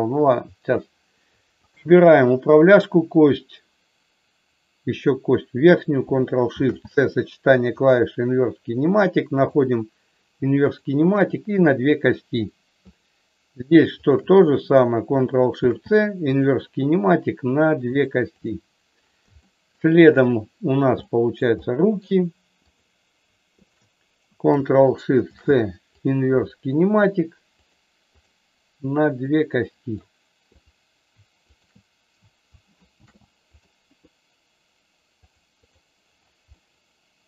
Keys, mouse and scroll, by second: 1.6 shift+click, 6.4 ctrl+shift+c, 9.3 click, 10.7 click, 11.2 click, 12.0 middle click, 14.0 shift+click, 16.3 ctrl+shift+c, 18.3 click, 19.5 shift+middle click, 20.9 middle click, 21.6 shift+middle click, 22.5 click, 23.6 shift+click, 25.2 ctrl+shift+c, 27.5 click, 29.2 middle click, 31.6 shift+click, 32.8 ctrl+shift+c, 36.5-37.2 middle drag.